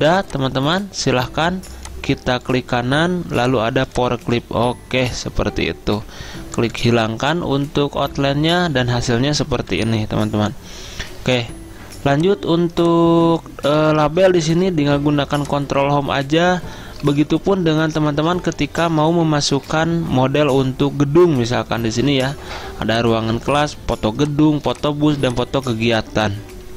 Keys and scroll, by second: 9.9 Down, 14.3 ctrl+Home, 17.1 alt+Tab, 18.2 alt+Tab.